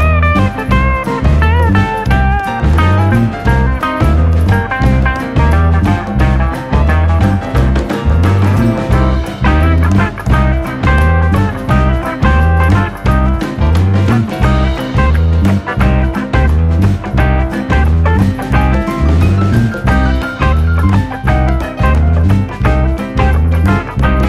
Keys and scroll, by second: 0.9 r, 4.3 ctrl+z, 5.3-6.4 typing, 8.7 p, 9.3 r, 10.9-11.6 typing, 19.7-20.7 typing, 20.9 Return.